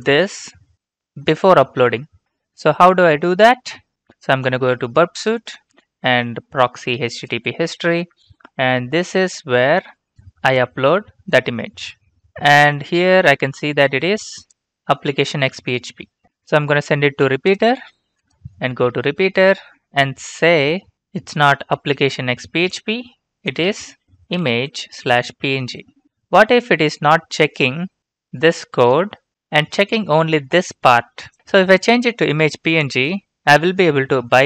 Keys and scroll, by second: 24.0-25.6 typing.